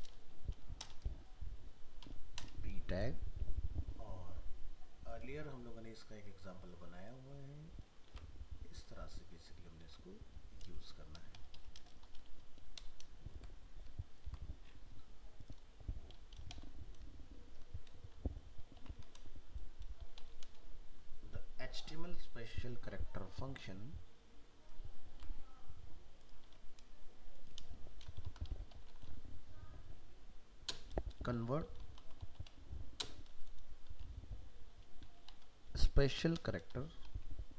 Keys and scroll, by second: 8.0 ctrl+c, 9.8 ctrl+v, 14.2 ctrl+s, 25.1 ctrl+c, 26.4 ctrl+v.